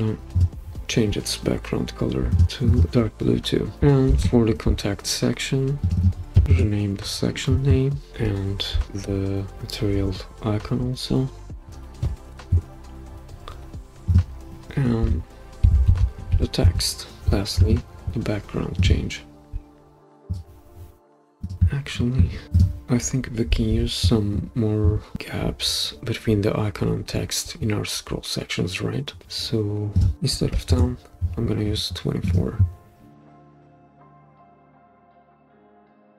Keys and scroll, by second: 4.1 super+d, 6.4 typing, 6.5 Return, 12.3 typing, 12.5 Return, 15.4-17.3 typing, 30.1-31.0 typing, 32.7 typing, 34.2 typing, 35.4-36.1 typing.